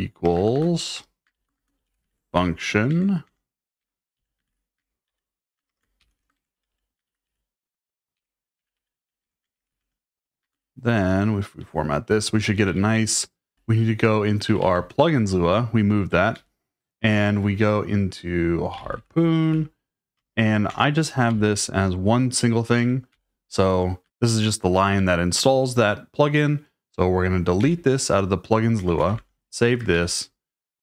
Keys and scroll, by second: 0.0-6.0 typing, 3.8 Escape, 7.9-12.3 typing, 13.3-15.1 typing, 16.3 /, 18.5-20.1 typing, 20.7 Return, 21.3 shift+v, 22.7 Escape, 23.1 n, 27.6 d, 28.6-29.9 typing.